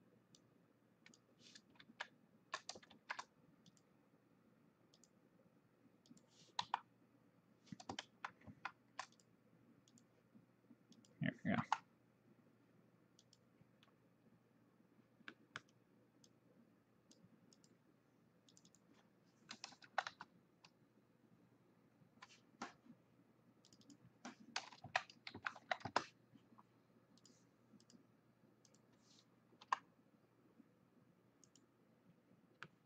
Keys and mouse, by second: 1.9 ctrl+z, 3.5 ctrl+z, 3.8 click, 5.0 click, 6.1 click, 6.7 e, 8.1 ctrl+z, 9.2 click, 11.0 click, 11.7 e, 13.3 click, 15.4 middle click, 16.3 click, 17.7 click, 19.9 KP_4, 23.7 click, 24.9 KP_3, 25.4 KP_Decimal, 25.7 KP_7, 27.3 click, 29.7 t, 31.5 click, 32.7 middle click.